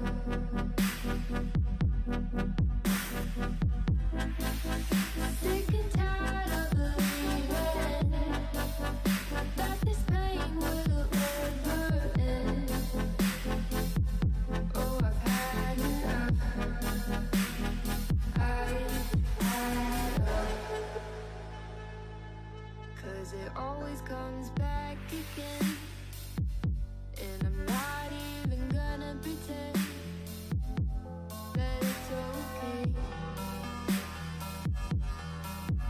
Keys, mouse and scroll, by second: 0.5 alt+z, 0.7 click, 1.6 g, 3.6 alt+z, 4.0-4.7 middle drag, 4.7 click, 5.1 Tab, 5.4-5.9 scroll down 3, 5.9 click, 7.0 click, 8.6-10.0 middle drag, 11.8 click, 15.2 click, 16.2 middle click, 17.0 click, 18.7-20.4 click, 20.1 click, 20.1 click, 20.7 click, 21.1 click, 21.3 click, 21.9 middle click, 22.8 click, 23.4 click, 23.5 click, 23.8 click, 24.4 middle click, 24.7 scroll down 2, 24.8 middle click, 25.5 click, 25.7 click, 26.3 KP_3, 26.5 Tab, 26.7 scroll up 3, 27.2 a, 27.4 scroll up 2, 27.7 g, 30.2-30.8 scroll down 5, 30.4 middle click, 30.8 middle click, 31.2 click, 31.4 Tab, 31.8-33.2 middle drag, 33.5 Tab, 33.8 a, 34.2 shift+d, 35.3 p.